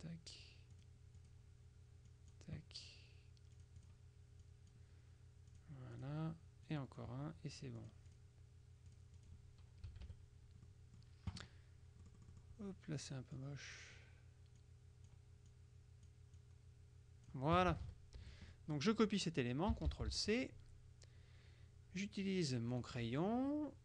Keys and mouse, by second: 0.8 click, 2.2 click, 3.6-5.3 drag, 5.6-6.6 drag, 6.7 click, 7.9 click, 8.9 click, 9.9 KP_Subtract, 10.8 click, 12.1 click, 13.5 click, 14.7 click, 16.5 click, 17.7 KP_Subtract, 18.3 F1, 18.6 click, 20.0 ctrl+c, 20.3 ctrl+click, 22.8 click.